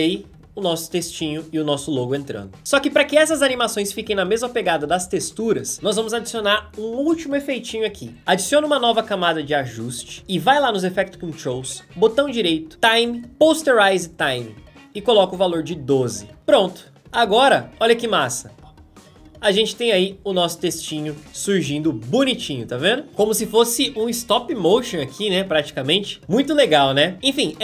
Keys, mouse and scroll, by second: 1.9 space, 3.5 space, 17.3 space, 21.9 space, 27.5 space.